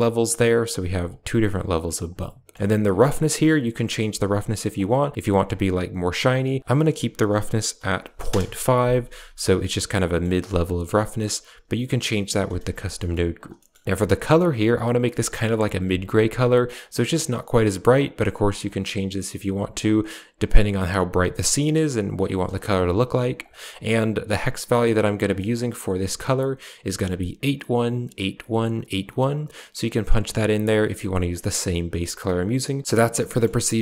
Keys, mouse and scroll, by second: 0.9 click, 2.9 middle click, 3.7 shift+middle click, 4.6 click, 6.5-8.1 drag, 9.9 middle click, 10.4 click, 13.8 ctrl+v, 23.2 click, 24.4 middle click, 25.1 click, 32.6 click, 33.1 middle click.